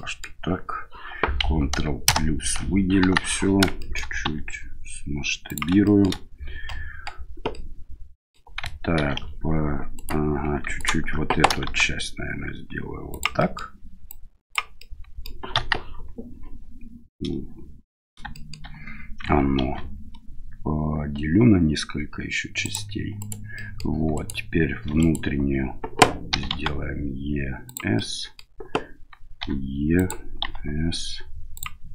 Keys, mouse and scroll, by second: 3.0 KP_1, 3.7 shift+middle click, 4.2 s, 5.8 shift+middle click, 6.7 middle click, 7.5 middle click, 8.9 ctrl+r, 10.8 right click, 11.6 s, 13.4 middle click, 14.0 click, 14.8 middle click, 15.5 KP_1, 18.3 shift+middle click, 19.6 ctrl+r, 23.5 middle click, 24.1 right click, 24.8 3, 25.0 right click, 26.3 e, 28.0 middle click, 29.9 e, 30.4 s.